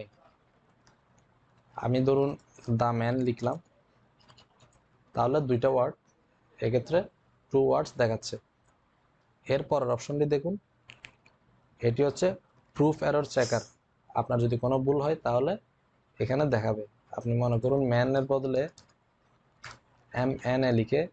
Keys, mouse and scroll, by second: 5.9-6.7 typing, 17.4-18.1 typing, 17.6 click.